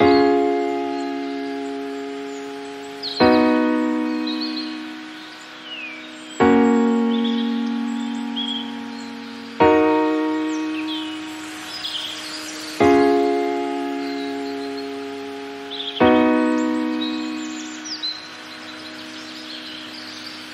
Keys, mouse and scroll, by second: 1.3 scroll down 1, 1.7-2.2 shift+middle drag, 2.2-5.3 drag, 5.3-7.2 shift+middle drag, 7.2 scroll up 1, 7.5-9.2 middle drag, 9.2 click, 9.7 scroll down 2, 10.0 middle drag, 10.3 scroll up 2, 10.6-13.3 shift+middle drag, 13.3 click, 15.4-15.9 drag, 16.6-17.5 scroll down 2, 17.5 click, 18.2-20.5 drag.